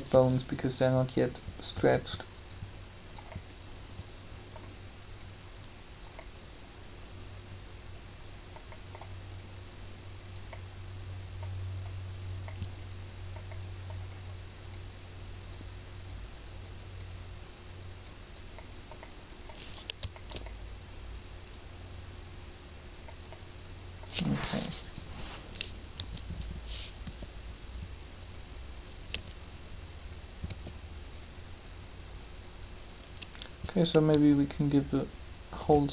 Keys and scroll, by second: 24.5 7, 27.0 r, 29.1 r, 35.7 shift+r.